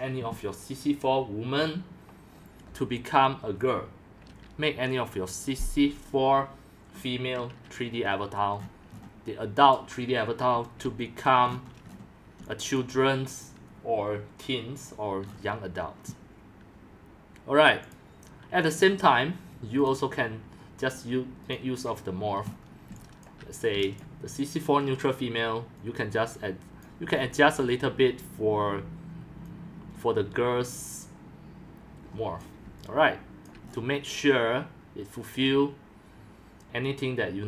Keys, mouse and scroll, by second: 8.6 scroll up 6, 8.9 scroll down 3, 9.1 scroll, 10.6 x, 10.9 c, 11.3 drag, 11.6-11.9 scroll up 7, 11.9 scroll down 5, 12.4 c, 12.8 click, 13.0 c, 15.3-15.6 scroll up 5, 16.9 scroll down 5, 17.2 scroll, 18.1 click, 18.8 scroll, 18.9-19.4 scroll down 4, 19.9-22.4 drag, 22.4-23.3 scroll down 5, 22.9 c, 23.3-27.1 drag, 23.7 c, 27.1-28.8 scroll up 6, 32.4 click, 32.7-33.5 c, 33.7-34.8 scroll up 5, 34.8 scroll.